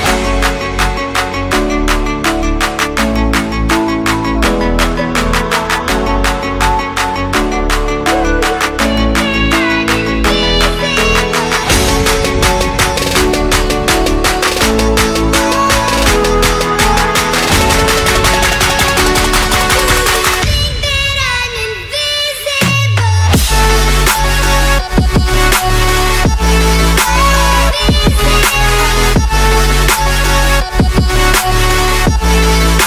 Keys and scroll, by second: 7.0 shift+Return, 7.8-11.8 typing, 18.4 super+g, 30.7 alt+shift+super+e, 31.4 shift+super+a.